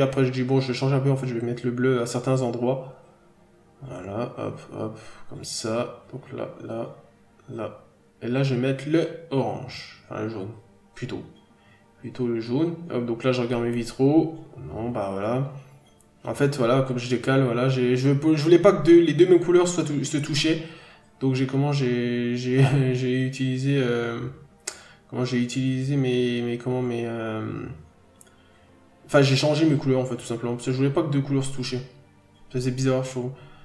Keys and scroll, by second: 3.3 scroll down 1, 3.4 n, 5.3 ctrl+z, 7.0 scroll down 1, 9.2 b, 9.5 scroll down 1, 10.0-10.5 scroll up 1, 11.3 scroll down 1, 11.6 n, 11.7 scroll up 1, 12.0-12.6 scroll down 1, 13.5-13.9 scroll up 1, 16.8 p, 19.6 ctrl+z, 20.4 p, 22.0 f, 22.8-23.2 scroll down 1, 23.8 scroll up 1, 24.6 p, 26.3 n, 26.8 f, 27.7-28.1 scroll down 1, 29.0 p, 30.0-30.3 scroll down 1, 30.3 n, 30.8 scroll up 1, 32.8 f, 33.4 scroll down 1.